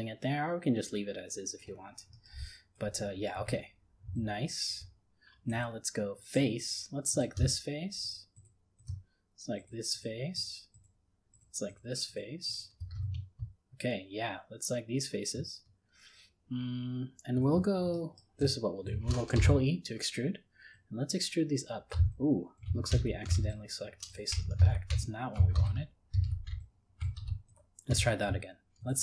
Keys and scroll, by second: 19.4 ctrl+e, 22.9 ctrl+z.